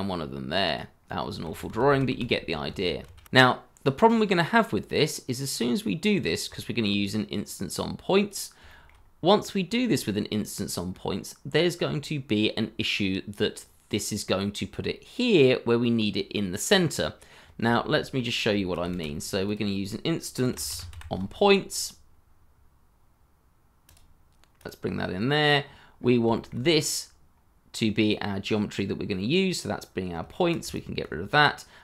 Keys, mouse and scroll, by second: 1.4 ctrl+z, 3.0 ctrl+shift+z, 6.2 scroll down 1, 6.5 shift+middle click, 8.6 shift+middle click, 10.1-10.9 scroll down 1, 10.9-12.8 scroll up 1, 17.7 shift+middle click, 18.1 scroll down 1, 18.5 shift+middle click, 20.3-20.9 typing, 25.9 scroll up 1, 26.3 shift+middle click, 30.2 shift+middle click, 30.7 ctrl+right click.